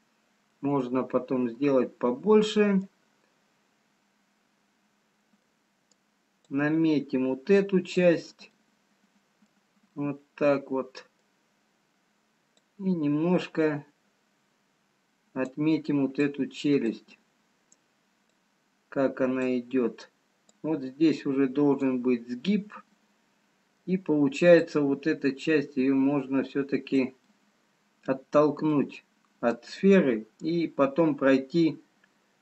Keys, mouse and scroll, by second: 0.1 click, 1.4 middle click, 5.4 middle click, 6.6 click, 8.7 middle click, 10.7 middle click, 12.7 click, 16.7 click, 20.0 click, 22.5 middle click, 25.1 click, 27.3 middle click, 28.2 scroll down 1, 28.8 middle click.